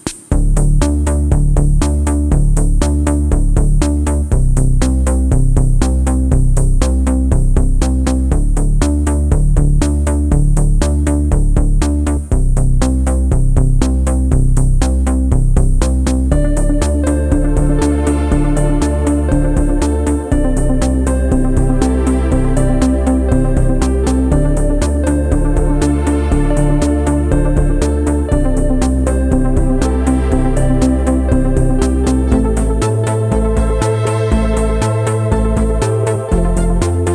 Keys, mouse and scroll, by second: 31.3-32.3 scroll down 6, 31.5 middle click, 31.6 ctrl+s, 31.6 shift+middle click, 31.7 shift+a, 32.2 shift+middle click, 32.5 s, 32.8 scroll up 4, 32.9 Tab, 33.0 shift+middle click, 33.1 ctrl+r, 33.3 ctrl+r, 33.4 middle click, 33.6 Tab, 33.8 middle click, 34.4 shift+middle click, 34.5 scroll down 1, 34.7 scroll up 1, 34.9 click, 35.2 scroll up 3, 35.4 click, 35.8 click, 36.2 middle click, 36.2 scroll down 4, 36.2 shift+click, 37.0 scroll up 4.